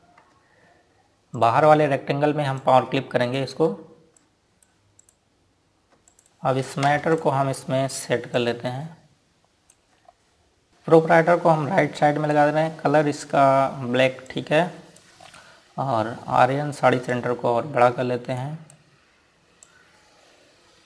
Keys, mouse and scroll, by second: 0.0 click, 3.7 click, 5.2 click, 6.1 click, 6.2 right click, 6.9 click, 7.9 ctrl+space, 8.3 click, 10.7 z, 10.7 click, 13.7 scroll up 1, 15.4 click, 16.3 scroll down 1, 17.2 scroll up 1, 18.2 click.